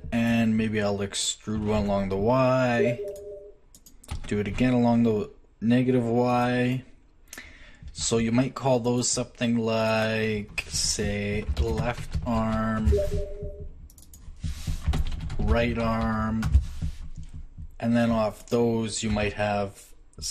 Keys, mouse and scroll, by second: 1.6 e, 4.1 e, 9.9-11.9 right drag, 13.9-15.9 right drag, 19.1 e.